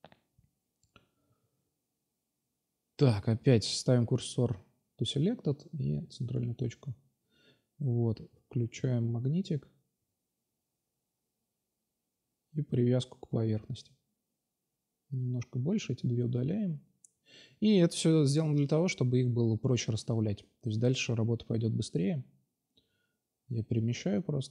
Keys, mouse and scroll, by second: 0.7 Tab, 1.6 ctrl+c, 1.9 ctrl+c, 2.2 space, 2.8 Tab, 5.3 g, 6.1-6.6 drag, 7.1 s, 7.9-8.5 drag, 9.0 g, 10.8 g, 11.5 shift+d, 12.1 shift+d, 13.4-14.0 right drag, 14.0-16.9 typing, 18.1 g, 19.4 drag, 19.9 middle click, 20.3 shift+d, 22.0 g, 24.0-24.5 drag.